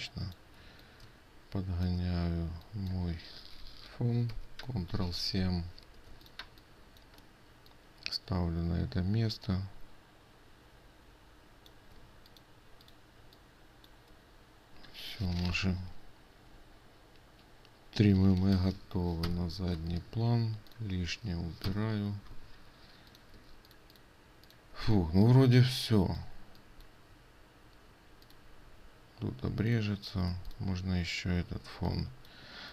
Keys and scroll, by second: 4.9 ctrl+7, 12.6 ctrl+space, 23.9 ctrl+space.